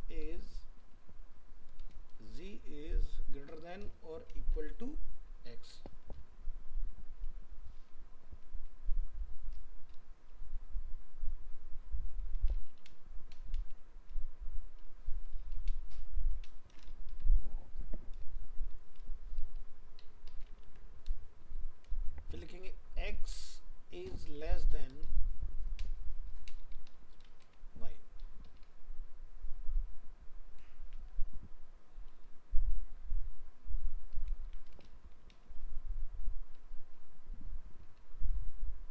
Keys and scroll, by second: 20.6 ctrl+c, 21.4 ctrl+v, 27.4 ctrl+s, 34.5 ctrl+shift+Left.